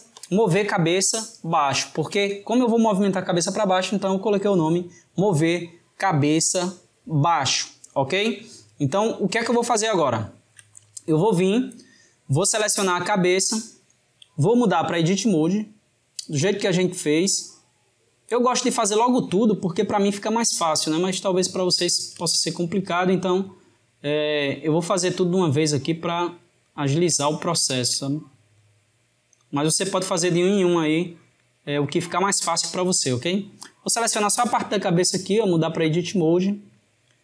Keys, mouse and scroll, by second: 8.4-13.0 shift+middle drag, 15.0-18.1 drag, 19.8 shift+click, 22.2 click, 23.1 shift+click, 23.9 shift+click, 25.0 shift+click, 26.2 shift+click, 28.3 shift+click, 29.4 shift+click, 30.5 g, 34.8-37.2 drag.